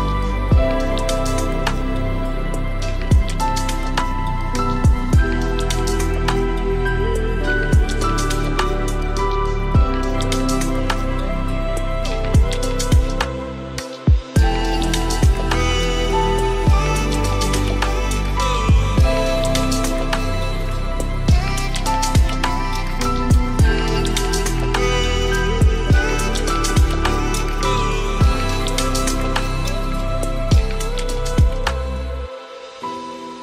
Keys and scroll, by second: 10.7 ctrl+space.